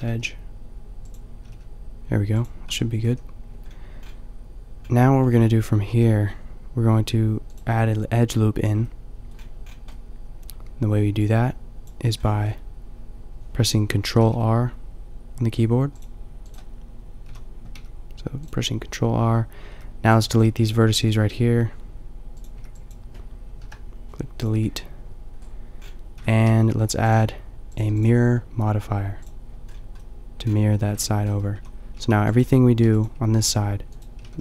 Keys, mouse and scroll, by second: 1.4 g, 2.7 Tab, 3.1 a, 3.7-4.9 middle drag, 5.3 middle click, 5.9 ctrl+r, 6.6 middle click, 7.6-8.9 drag, 8.9-10.5 middle drag, 14.2 ctrl+r, 16.5 click, 17.3 a, 17.9 b, 19.7 b, 20.5 g, 22.6 b, 23.6 Delete, 25.4 middle click, 26.0 click, 26.2 Tab, 27.2-29.2 drag, 29.7 middle click, 30.2-31.0 middle drag, 31.0 Tab, 31.6-34.4 typing.